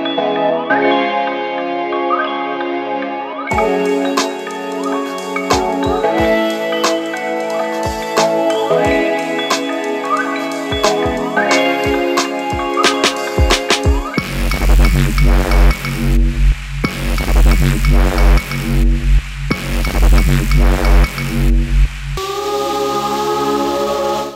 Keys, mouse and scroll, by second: 3.4 ctrl+t, 4.2-4.9 drag, 10.2-10.9 drag, 12.7-19.7 drag.